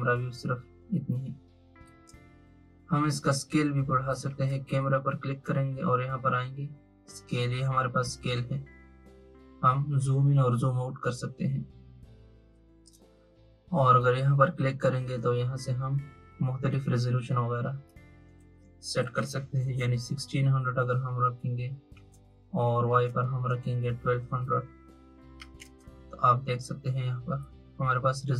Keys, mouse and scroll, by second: 4.2 click, 8.1-11.2 drag, 14.8 click, 17.8-20.9 drag, 22.8-24.2 drag, 24.2 0.